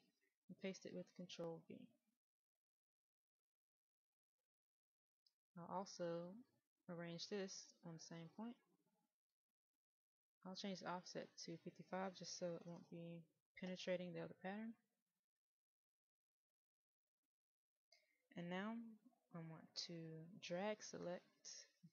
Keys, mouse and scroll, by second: 0.2 ctrl+v, 3.6 click, 12.5 KP_5, 15.8 click.